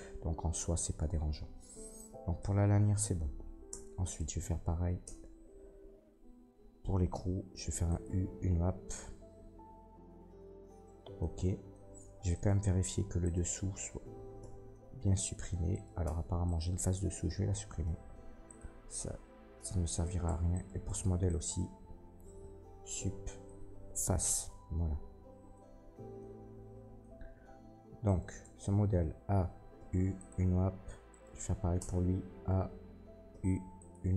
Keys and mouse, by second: 1.9-4.0 drag, 3.7 Tab, 4.0 middle click, 4.1-12.3 drag, 5.0 Tab, 5.6 a, 7.1 u, 11.9 Tab, 12.3 middle click, 12.4-13.2 drag, 13.2 middle click, 13.3-17.8 drag, 14.3 h, 15.7 middle click, 15.7 right click, 16.0 Tab, 16.4 middle click, 16.4 right click, 17.8 Delete, 19.9 middle click, 20.2 Tab, 20.5 middle click, 20.8 Tab, 21.2 middle click, 22.7 Delete, 24.0-29.7 drag, 27.6 Tab, 28.0 middle click, 28.0 right click, 28.4 Tab, 28.8 a, 29.7 u, 30.7 Tab, 31.0-33.2 drag, 31.0 middle click, 31.0 right click, 31.7 Tab, 32.1 a, 33.2 u.